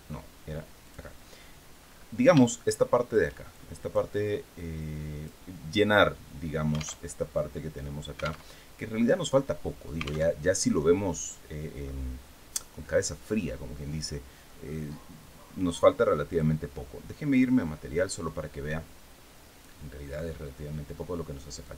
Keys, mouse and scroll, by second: 0.5 click, 1.5-1.9 scroll up 2, 2.1 shift+middle click, 3.2 shift+click, 4.1 scroll up 1, 4.5 click, 6.7 alt+Tab, 8.1 alt+Tab, 10.0 alt+Tab, 12.3-12.7 scroll down 2, 13.1-13.4 scroll up 2, 14.0-14.3 scroll down 2, 16.0 click, 17.0 click.